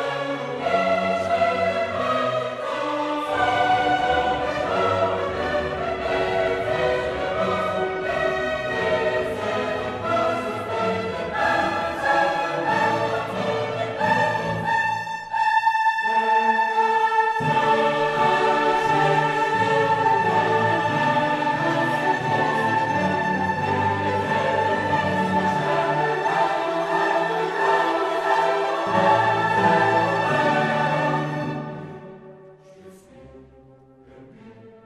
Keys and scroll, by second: 18.1 ctrl+alt+shift+e.